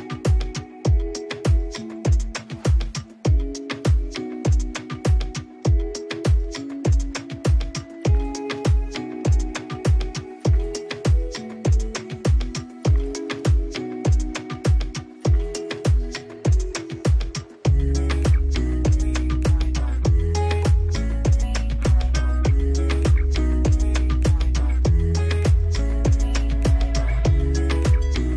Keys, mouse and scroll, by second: 2.5-23.3 drag, 23.7 click, 27.1 scroll down 1.